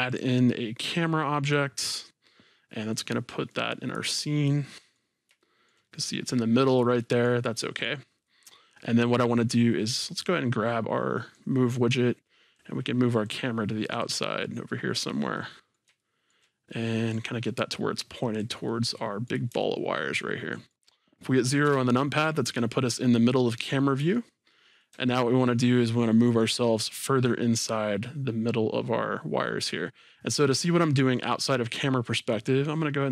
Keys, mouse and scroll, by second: 0.1-3.6 drag, 3.9-4.5 scroll down 2, 4.5-8.2 middle drag, 10.5-14.4 drag, 14.4-17.1 middle drag, 17.1-18.7 drag, 18.7-22.4 middle drag, 27.1-31.0 middle drag, 27.1-27.4 scroll.